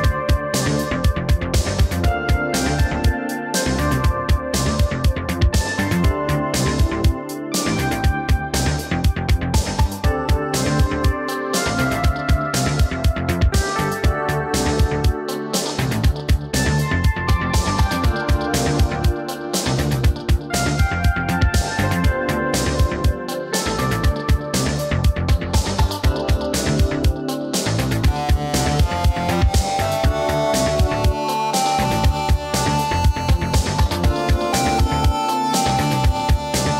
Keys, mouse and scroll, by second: 2.8 click, 5.4 typing, 7.3 typing, 9.5-9.9 typing, 13.7 right click, 19.0 scroll down 1, 20.9 click, 24.5 typing, 36.5 typing.